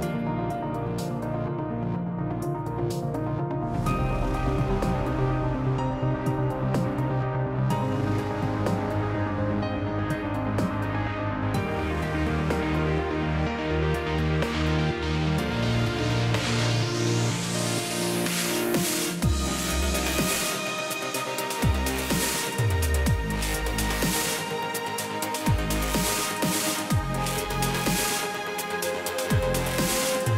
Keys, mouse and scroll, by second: 0.6 click, 1.5 F1, 3.4 click, 4.2 shift+click, 5.2 ctrl+g, 6.7 Home, 8.6 ctrl+shift+g, 10.0 click, 11.9 ctrl+d, 13.5 shift+click, 14.9 ctrl+-, 16.4 click, 18.0 ctrl+d, 19.1 shift+click, 20.5 ctrl+-, 22.6 click, 23.6 click, 25.3 click, 26.4 click, 28.1-28.8 scroll, 29.1-29.4 scroll.